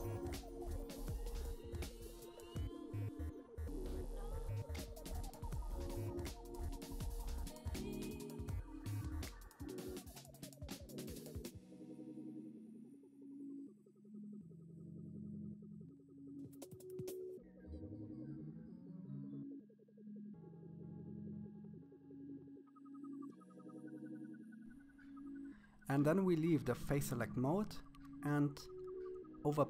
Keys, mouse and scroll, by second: 7.2 scroll down 1, 7.3 middle click, 7.6 shift+middle click, 7.7 scroll up 1, 7.8 f, 8.4-9.5 drag, 9.6 c, 10.6 scroll down 2, 10.7 middle click, 10.9 c, 12.1 middle click, 12.4 c, 13.4 scroll down 1, 13.5 middle click, 13.7 scroll up 1, 13.7 c, 14.7 middle click, 15.0-19.0 typing, 15.6 middle click, 16.3 scroll down 4, 16.3 middle click, 16.8 scroll down 1, 16.8 middle click, 16.9-17.3 scroll up 4, 17.1 middle click, 17.5 middle click, 17.7 scroll down 1, 17.7 middle click, 18.2 scroll up 1, 18.8 middle click, 19.4 middle click, 19.9 scroll down 4, 20.0 middle click, 20.2 KP_1, 20.3 click, 20.4 scroll up 1, 21.0 click, 21.5 middle click, 21.8-22.2 scroll down 1, 22.2 click, 22.7 middle click, 22.9 middle click, 23.1 KP_1, 23.2 scroll down 4, 23.3 shift+middle click, 23.5-24.1 scroll up 1, 24.8 click, 25.3 KP_3, 25.8 click, 26.2 middle click, 26.4 KP_1, 27.0 click.